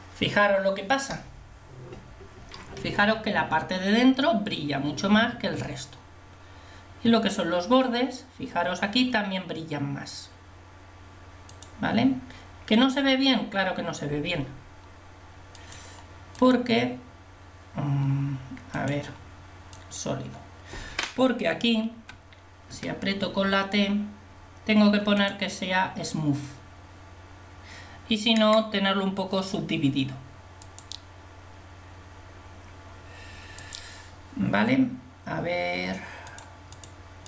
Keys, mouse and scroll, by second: 18.7 click, 22.0 t, 22.7 t, 25.2 click, 36.8 click.